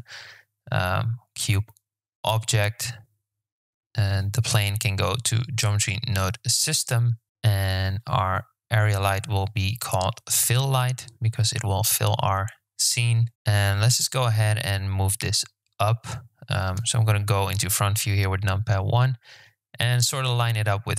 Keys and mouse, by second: 2.9 click, 3.6 Return, 4.8-7.2 drag, 7.2 BackSpace, 7.5 click, 8.5-11.9 drag, 10.3 l, 13.3 g, 16.5 KP_1, 18.3 g.